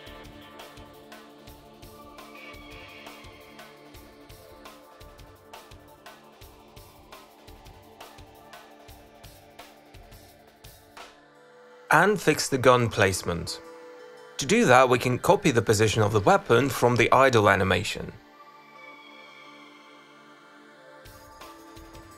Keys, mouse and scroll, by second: 0.8 click, 1.8 click, 2.7 click, 2.8 click, 3.3 middle click, 4.6 click, 5.7 click, 6.2 click, 6.5 click, 6.9 click, 7.0 click, 7.4 middle click, 8.4 ctrl+Tab, 9.1 click, 9.3 click, 9.7 click, 9.9 click, 10.7 ctrl+c, 10.9 click, 11.4 click, 12.1 click, 14.7 click, 15.0 click, 15.3 click, 16.0 click, 16.1 click, 16.6 middle click, 17.2 ctrl+c, 17.4 click, 18.1 click, 18.2 click, 18.8 q, 19.6 click, 19.7 click, 20.5 middle click, 21.2 e, 21.7 d, 21.9 ctrl+z.